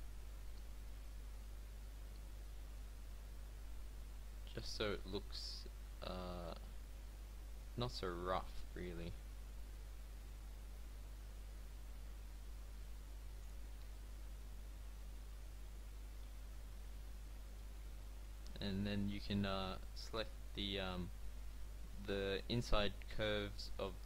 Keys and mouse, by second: 0.5 ctrl+b, 13.9 middle click, 14.8 a, 15.6 click, 16.3 Tab, 18.4 Tab, 22.3 shift+middle click.